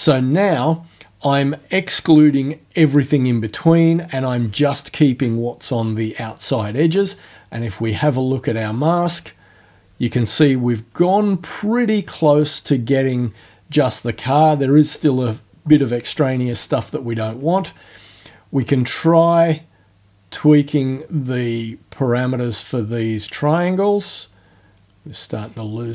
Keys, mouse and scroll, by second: 8.6 click, 18.6-25.5 drag.